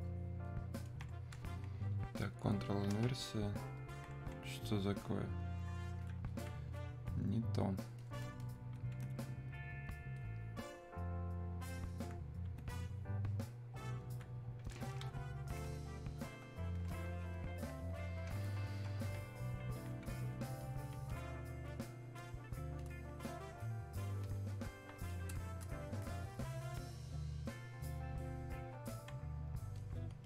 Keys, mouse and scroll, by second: 10.2-16.5 ctrl+drag, 18.0-26.5 ctrl+drag, 26.5-30.2 ctrl+drag.